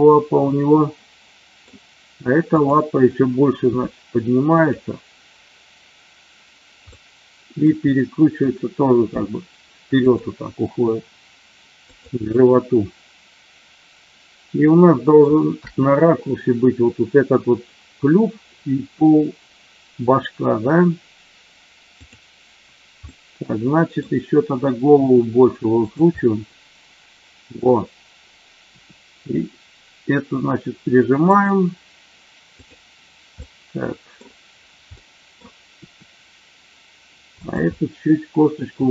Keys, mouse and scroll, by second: 2.5 click, 3.6 g, 4.4 click, 6.8-7.6 middle drag, 7.8 middle click, 9.9 click, 11.8 click, 12.2-15.2 middle drag, 23.0-24.0 middle drag, 25.9 click, 26.1-27.5 middle drag, 28.6 r, 31.2 click, 32.6 click, 33.4-34.2 middle drag, 34.9-35.4 middle drag, 35.7 r, 37.2 click, 37.7-38.7 middle drag.